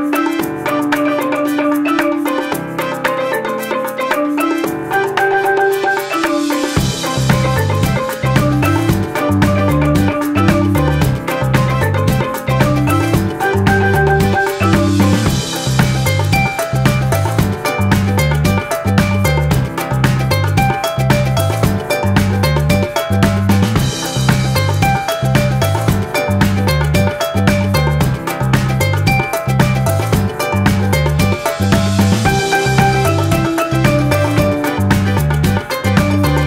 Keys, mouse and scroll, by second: 18.9 click, 21.3 click.